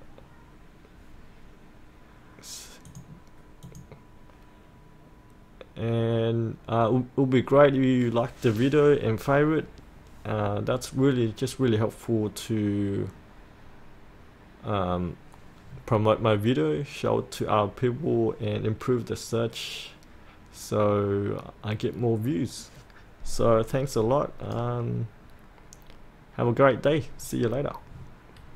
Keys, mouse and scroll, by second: 2.9 click.